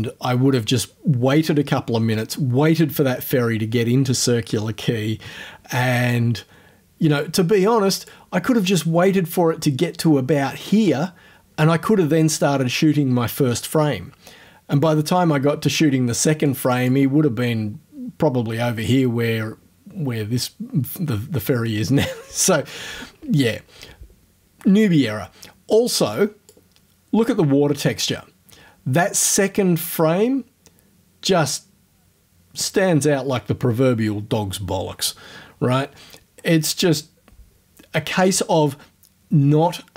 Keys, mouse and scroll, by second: 6.4-7.4 drag, 7.6 click, 16.5 click, 23.6-24.0 scroll down 2, 25.4-26.0 scroll up 4, 26.2 click.